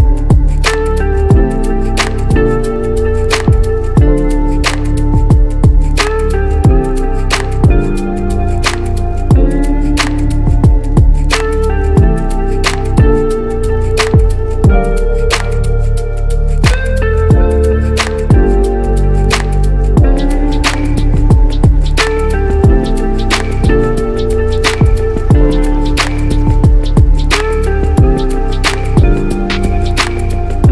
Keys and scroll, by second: 2.0-2.8 typing, 2.9 Return, 5.9 b, 8.0 i, 10.3 b, 10.7 [, 12.4 ctrl+t, 22.0 b, 24.6 x.